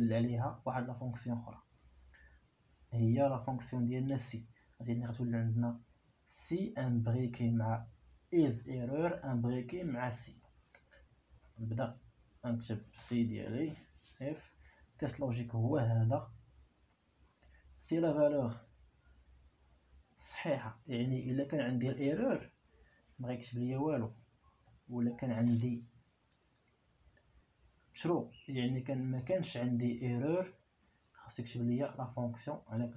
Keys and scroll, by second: 11.8 i, 13.6 5, 18.5 ., 23.8 3, 25.0 ., 32.2 ctrl+v.